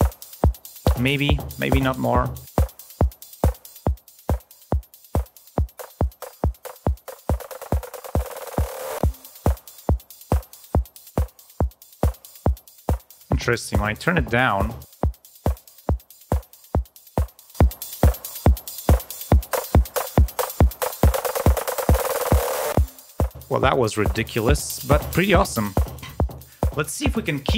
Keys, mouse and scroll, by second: 1.5-2.6 drag, 3.6 click, 4.3 click, 5.4 click, 6.8 click, 7.9 click, 8.6-10.4 drag, 10.9 click, 11.9 click, 12.5 click, 13.5 click, 14.8 click, 16.1 click, 17.3 click, 20.4 click.